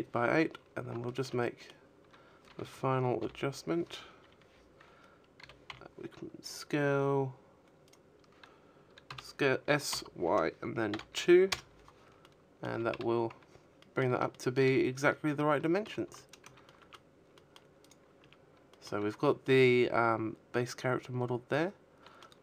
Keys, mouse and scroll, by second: 0.3 l, 1.4 KP_3, 3.1 s, 5.2 right click, 6.4 s, 9.5 middle click, 10.0 a, 10.2 z, 10.6-11.4 scroll down 4, 11.1 middle click, 11.6 shift+middle click, 12.2-12.7 scroll down 2, 13.0 shift+middle click, 13.3 a, 14.0 middle click, 14.0 a, 14.7 middle click, 15.5 Tab, 15.5 right click, 15.9 middle click, 16.2 a, 16.7 middle click, 20.0 middle click, 21.5 middle click.